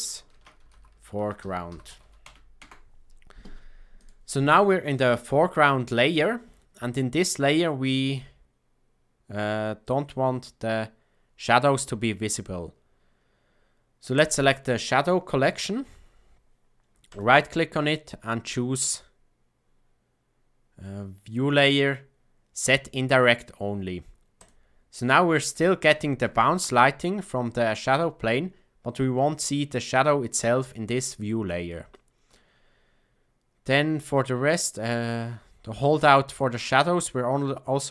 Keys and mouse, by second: 2.5 Return, 14.1 click, 17.0-24.4 right drag, 25.9 shift+middle drag, 31.1-31.6 shift+middle drag, 31.8 shift+middle click.